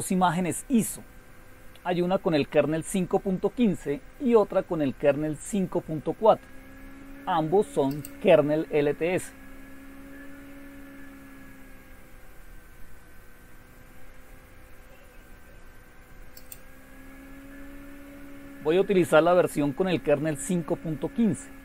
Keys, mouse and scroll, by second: 7.9 click, 8.2 click, 10.5-12.4 scroll down 2, 16.4 click, 16.8 click, 18.4-18.9 scroll down 3.